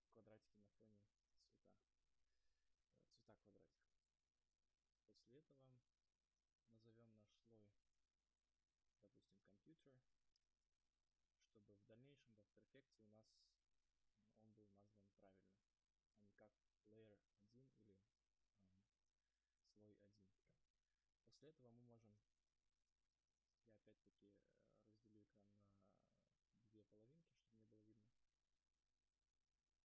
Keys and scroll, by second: 3.9 space, 10.6 Return, 22.4 alt+Tab.